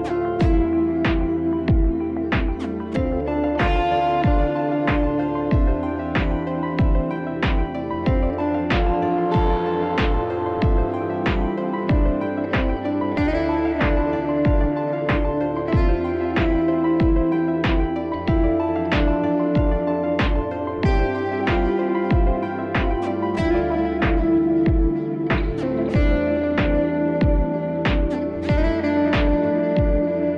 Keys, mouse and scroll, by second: 1.1 click, 3.1 right click, 5.0 click, 6.6 click, 8.8 click, 12.6 click, 13.9 click, 15.0 click, 16.8 ], 17.3 ], 18.1 [, 18.3 [, 20.3 click, 20.3 [, 21.4 click, 23.9 click, 25.3 click, 28.6 ], 28.7 ], 29.6 click, 29.6 [, 30.1 ].